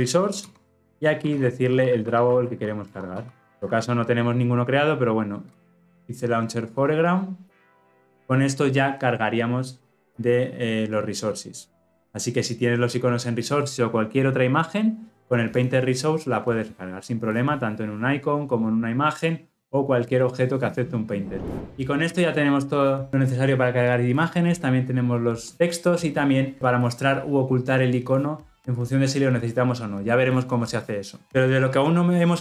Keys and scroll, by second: 0.7 Return.